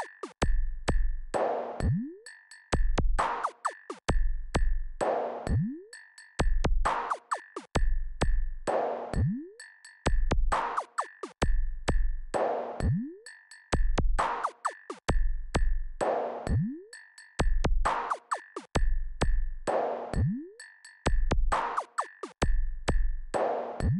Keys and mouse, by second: 3.3 KP_4, 3.5 KP_4, 7.7-12.0 drag, 13.5-23.0 drag.